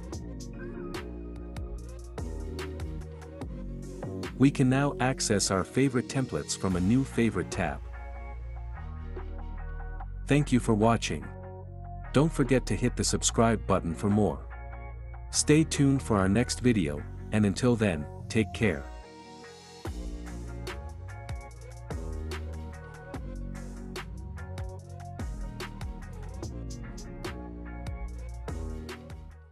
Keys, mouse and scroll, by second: 3.2-4.2 drag.